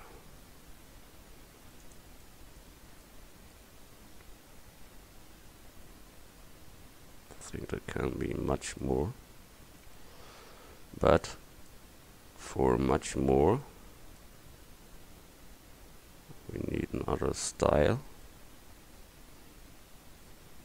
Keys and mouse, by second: 2.8 Tab, 4.2 middle click, 9.9 Tab, 10.8 Tab, 11.3 Tab, 13.8 Tab, 16.2 middle click, 16.5-17.0 middle drag, 17.1 middle click, 17.3 middle click, 17.8 Tab.